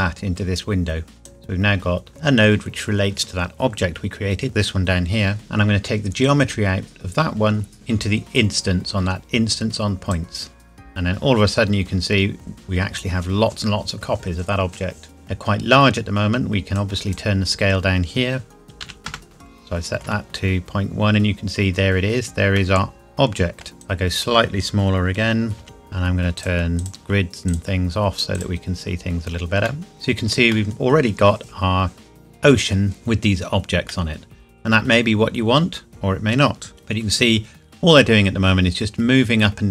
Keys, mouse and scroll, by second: 3.7 scroll down 1, 6.2 click, 11.9 scroll up 1, 15.1 shift+middle click, 16.7 click, 18.6 KP_Decimal, 18.8 KP_1, 19.1 KP_Enter, 19.4 shift+middle click, 20.5 scroll up 1, 21.8 scroll down 1, 22.6 middle click, 22.8 middle click, 23.8 click, 25.6 KP_Decimal, 25.8 click, 29.7 middle click, 29.9 space, 30.5 middle click, 33.9 middle click, 36.7 scroll up 1.